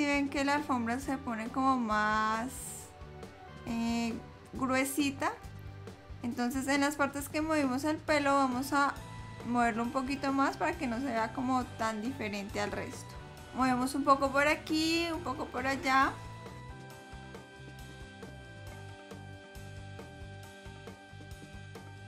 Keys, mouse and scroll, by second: 2.0 middle click, 9.6 click, 13.4 click, 15.6 click, 17.4 click, 20.6 click.